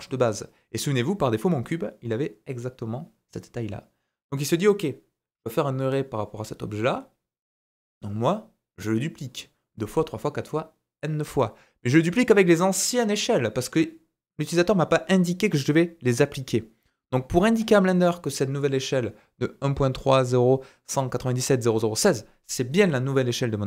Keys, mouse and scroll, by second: 1.5 typing, 22.0-23.6 middle drag.